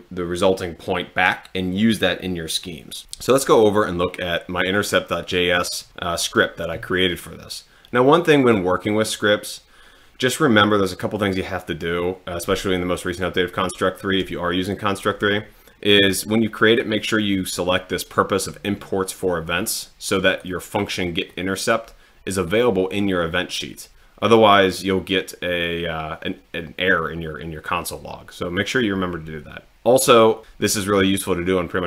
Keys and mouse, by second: 5.5 click, 20.3 click, 21.3 click, 22.4 click.